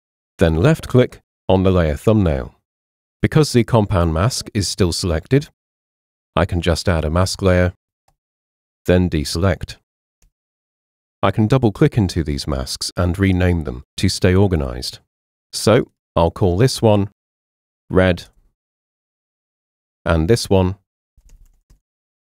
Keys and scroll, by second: 10.2 super+d, 17.2-18.3 typing, 20.9-22.3 typing.